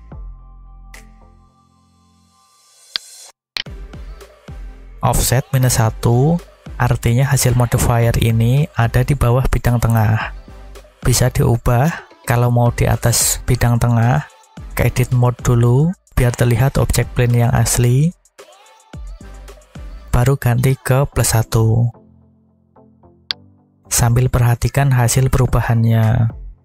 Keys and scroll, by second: 0.1 5, 1.1 Return, 18.4 Tab.